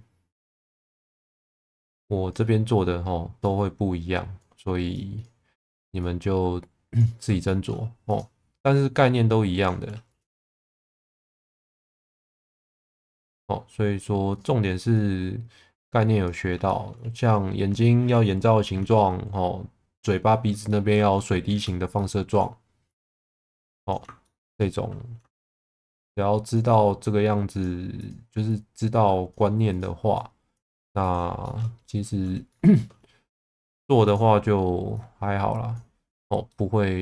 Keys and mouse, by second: 0.8 ctrl+z, 1.6 click, 3.4 click, 5.1 click, 6.0 click, 6.2 click, 7.4 shift+middle click, 8.7 click, 10.1 click, 10.4 shift+v, 12.4 shift+middle click, 14.3 click, 16.6 shift+middle click, 20.6 shift+middle click, 21.9 shift+middle click, 22.8 click, 24.2 shift+middle click, 25.7 shift+middle click, 26.4 click, 27.0 click, 28.5 click, 30.1 click, 31.1 click, 31.4 shift+middle click, 32.5 shift+middle click, 34.0 click, 34.9 click, 36.5 middle click.